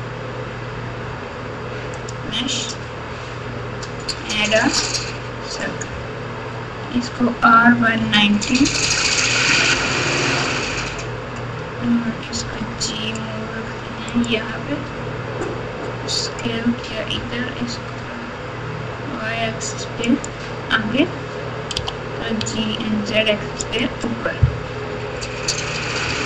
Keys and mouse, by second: 6.9 r, 12.3 g, 14.8 s, 17.1 g, 21.7 g, 24.7 KP_1.